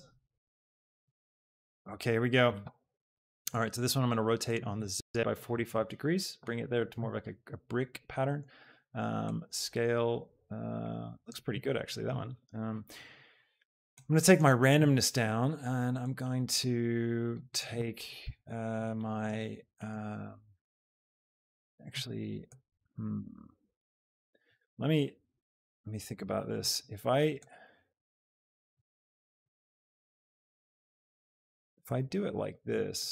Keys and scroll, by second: 5.4 KP_4, 5.8 Return, 18.2 Return, 24.5 ctrl+z, 25.6 Tab, 25.9 KP_1, 26.3 Return.